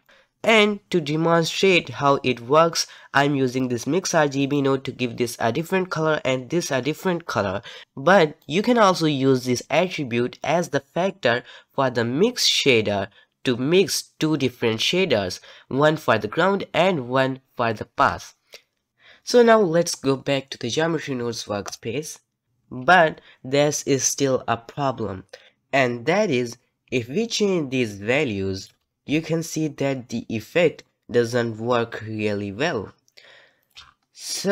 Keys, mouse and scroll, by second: 0.0 middle click, 0.1-18.9 drag, 18.9 Tab, 21.7 click, 22.4-25.5 shift+middle drag, 27.2-28.6 shift+drag, 29.3-33.7 shift+drag, 34.0-34.5 scroll down 1.